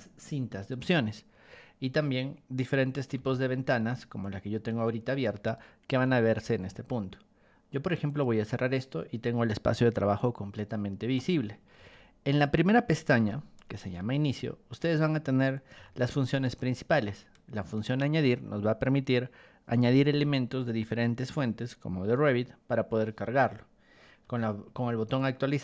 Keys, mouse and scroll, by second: 3.1 g, 4.2-5.5 ctrl+drag, 8.0 click, 11.8 ctrl+1, 12.3 click, 13.2 b, 14.3 ctrl+click, 15.7 r, 16.9 ctrl+click, 24.2 b, 25.2 ctrl+click.